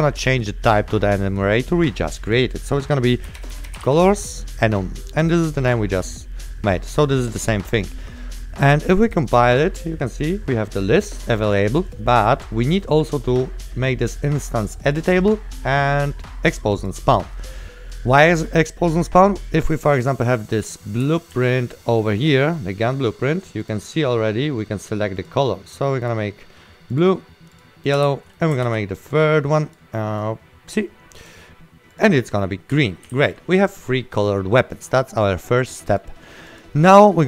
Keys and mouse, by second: 3.5-4.5 typing, 5.7 click, 15.0 click, 21.1 right click, 21.1 s, 21.4 d, 23.7 click, 26.1 click, 27.8-28.7 typing, 28.1 right click, 28.8 ctrl+w, 29.2 click, 32.5 right click, 32.5-33.8 typing, 35.9 click.